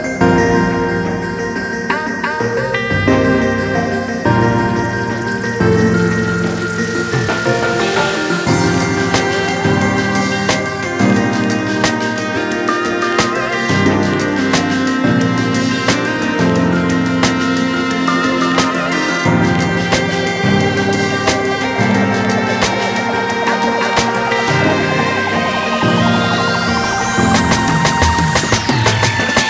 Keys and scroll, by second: 13.9-16.7 typing.